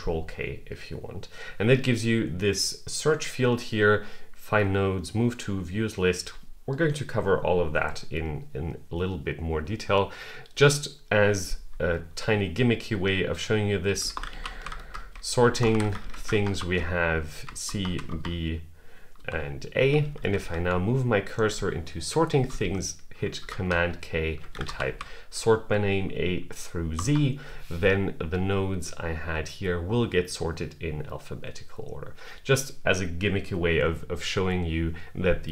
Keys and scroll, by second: 23.2 super+k.